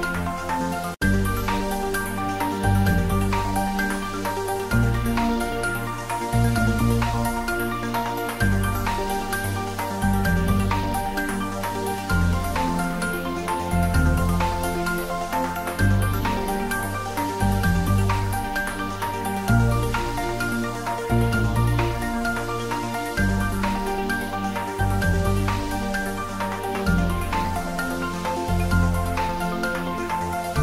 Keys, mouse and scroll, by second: 0.0-0.8 typing, 1.5 click, 3.8 click, 4.5 ctrl+middle click, 4.8 shift+middle click, 6.3-7.6 drag, 7.6 ctrl+middle click, 8.0 ctrl+s, 8.8-10.3 typing, 9.2 click, 10.4 click, 11.2 ctrl+middle click, 12.0 click, 16.3-18.8 drag, 21.4-26.5 drag, 26.5 click.